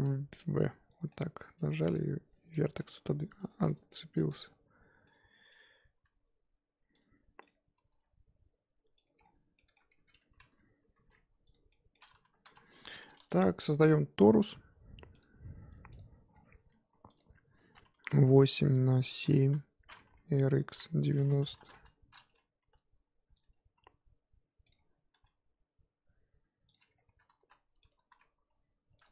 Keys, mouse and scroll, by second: 0.0 v, 1.1-3.3 middle drag, 3.3 2, 3.4 click, 3.6 middle click, 4.3 g, 5.5 click, 6.0 g, 7.4 click, 7.8 g, 9.2-9.5 scroll down 3, 9.5-9.9 middle drag, 9.9 Tab, 10.9 alt+h, 11.5 click, 11.7-12.4 middle drag, 12.4 KP_1, 16.0 shift+a, 16.3-17.0 scroll down 3, 18.2-20.6 drag, 20.6 r, 22.6 g, 24.6 click, 25.1 g, 26.7-27.0 scroll up 4, 27.0 Tab, 27.4 s, 27.9 z, 28.3 s.